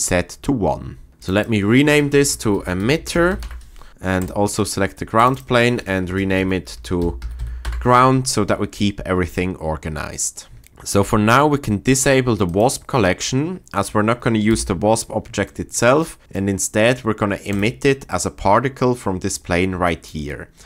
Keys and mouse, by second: 1.2 click, 1.3 click, 2.9 t, 10.6 shift+click, 12.5 click, 14.5 n, 15.4 shift+middle drag.